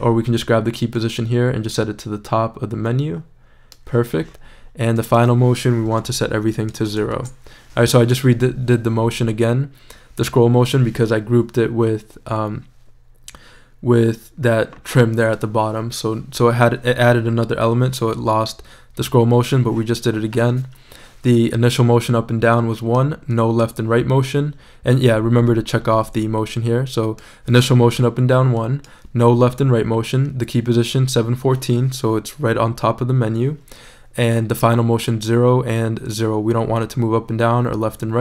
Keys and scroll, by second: 5.9 shift+0, 7.1 shift+Return.